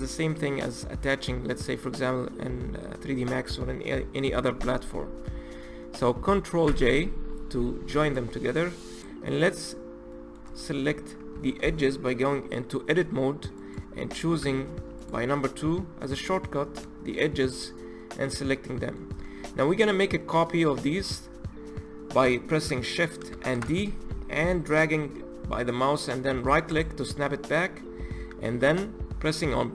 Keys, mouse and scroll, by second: 6.7 ctrl+j, 8.1 click, 8.4-9.0 scroll up 1, 9.0 click, 9.3 click, 9.8-10.1 scroll up 1, 10.1-11.4 middle drag, 11.4 Tab, 13.6 click, 14.4 2, 15.0 click, 16.1 shift+click, 17.5 shift+click, 18.3 shift+click, 18.8-23.4 middle drag, 23.4 shift+d, 27.4-29.7 middle drag.